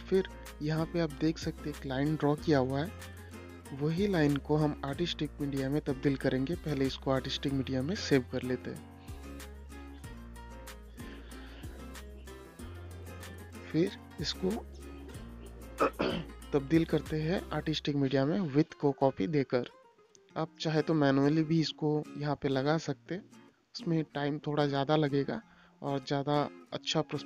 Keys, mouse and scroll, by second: 1.3 click, 3.7 click, 5.3 i, 5.7 Return, 6.7 click, 7.6 space, 10.3 click, 11.3 ctrl+c, 12.5 click, 13.7 i, 15.2 click, 16.2 ctrl+v, 16.7 Return, 18.7 space, 19.0 click, 20.7 right click, 21.5 click, 22.0 right click, 22.8 click, 26.5 click.